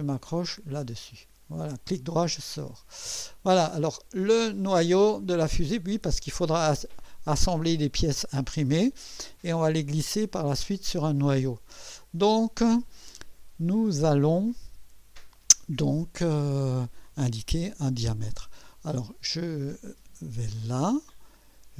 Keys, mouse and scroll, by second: 0.5 click, 1.9 right click, 2.7 scroll up 1, 3.9 right click, 20.7 click.